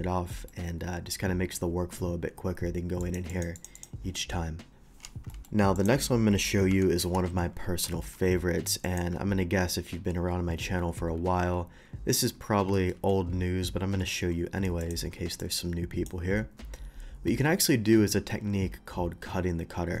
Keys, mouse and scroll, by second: 0.5-1.1 shift+middle drag, 3.0 click, 3.3 click, 3.6 click, 3.8 click, 5.3 middle drag, 5.8 click, 6.7 Delete, 7.0 KP_3, 8.3 shift+a, 8.8 click, 12.7 middle drag, 14.1 d, 14.8 click, 15.4 click.